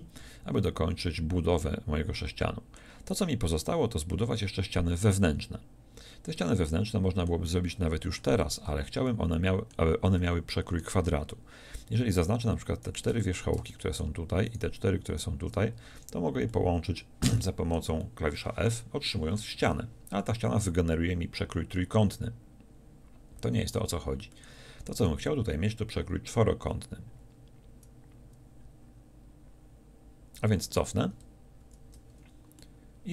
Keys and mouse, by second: 12.2-13.3 middle drag, 13.3 z, 16.0 f, 19.7 z, 31.6 ctrl+z.